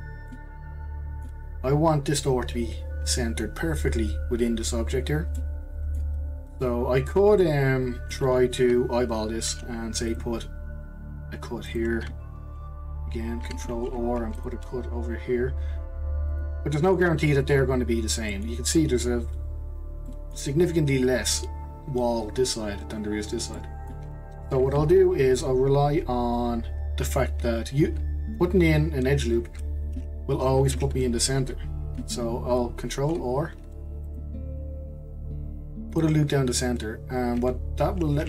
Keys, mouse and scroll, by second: 0.3-3.4 middle drag, 5.4-7.1 middle drag, 7.1 scroll down 2, 7.4-9.5 middle drag, 9.5 ctrl+r, 13.7 ctrl+r, 16.8-19.8 middle drag, 19.8 scroll up 1, 20.0-23.1 middle drag, 23.5-26.6 middle drag, 29.9 ctrl+z, 30.7 ctrl+z, 33.0 ctrl+r, 38.1-38.2 scroll down 2.